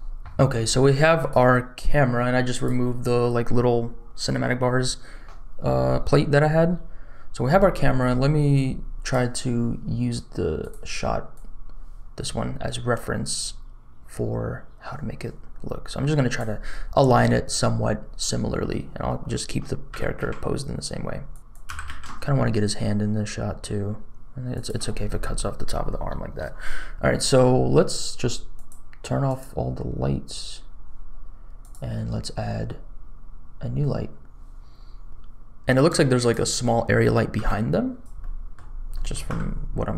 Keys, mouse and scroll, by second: 1.1 click, 2.5 click, 8.5 click, 21.3 click, 21.4 r, 21.6 g, 28.5 click, 29.2 click, 31.6 click, 35.1 shift+a, 37.4 g, 38.1 middle click, 38.6 scroll down 2, 38.9 middle click, 39.2 g.